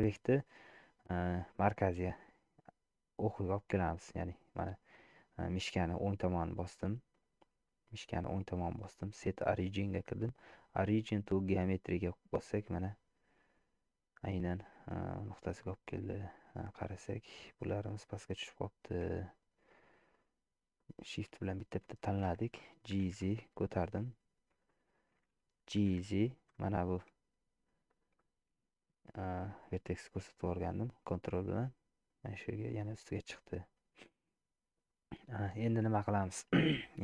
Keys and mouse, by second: 2.0-5.2 right drag, 5.9-11.9 right drag, 12.7 middle click, 13.3 click, 16.3 middle click, 17.9 click, 20.1 shift+click, 20.8 shift+click, 21.5 shift+click, 23.0 g, 24.7 shift+middle click, 25.9 g, 30.4-32.2 middle drag, 34.0 middle click, 34.9 middle click, 36.1 shift+middle click.